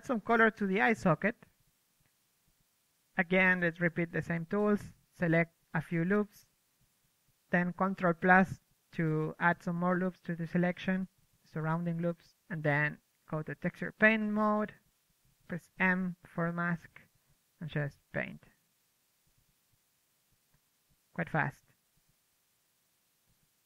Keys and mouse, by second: 0.1 KP_1, 0.3 Tab, 0.5 Tab, 1.2 click, 2.6 click, 3.1 Tab, 4.0 a, 5.0 KP_1, 5.2 ctrl+KP_Add, 5.9 ctrl+KP_Subtract, 6.0-8.0 typing, 8.4 ctrl+z, 9.1 KP_3, 9.8 KP_1, 10.2 Tab, 10.4 m, 10.7 f, 10.9 alt+z, 10.9 drag, 11.6 click, 11.7 ctrl+z, 11.9 Tab, 12.1 ctrl+z, 12.2 Tab, 12.7 alt+z, 12.8 alt+z, 13.1 m, 13.2-15.0 drag, 13.4 m, 15.3 alt+z, 15.4 alt+z, 15.6 m, 15.8 click, 15.9 m, 16.1-16.5 drag, 16.6 shift+f, 17.5 KP_3, 17.8-21.9 drag, 18.2-19.8 middle drag, 21.0 KP_1, 21.6 m, 21.9-22.4 middle drag, 22.0 KP_3, 22.3 KP_1, 22.8 Tab, 22.9 Tab, 23.0-23.6 drag.